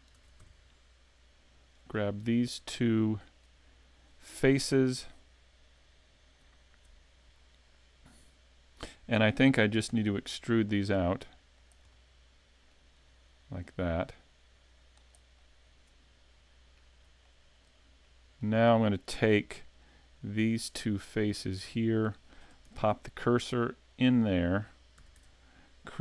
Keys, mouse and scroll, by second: 0.1 ctrl+Tab, 1.7 right click, 2.4 shift+right click, 2.7 middle click, 5.6 middle click, 9.9 e, 11.7 click, 11.9 middle click, 13.6 click, 15.3 middle click, 17.2 shift+middle click, 18.0 middle click, 19.5 right click, 19.8 middle click, 21.3 shift+right click, 21.7 middle click, 22.7 shift+s, 24.3 middle click, 24.6 scroll up 1, 25.0 a, 25.2 Tab.